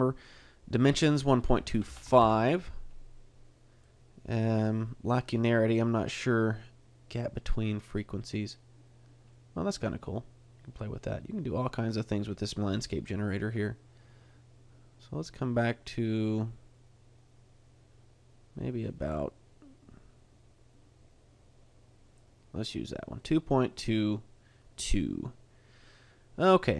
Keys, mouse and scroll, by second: 0.8 click, 3.8 click, 7.9 click, 23.2 middle click.